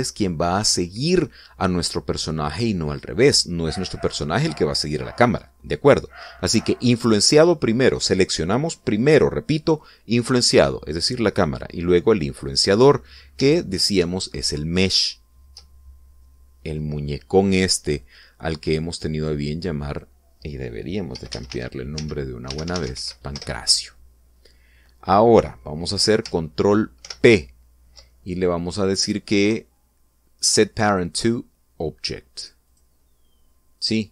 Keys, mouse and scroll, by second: 14.5 shift+right click, 19.9 click, 20.6 click, 21.8-23.7 typing, 24.1 Return, 27.8 ctrl+p, 33.4 click.